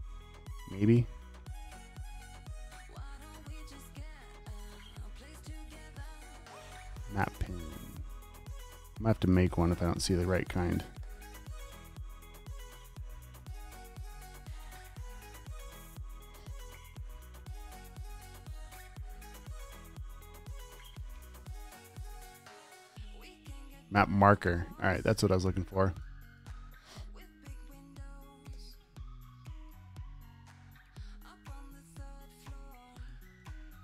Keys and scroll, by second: 20.8 super+a, 21.4-22.3 typing, 26.3 super+c, 28.1 super+v, 28.8 space, 31.5 super+a, 32.0-32.8 typing.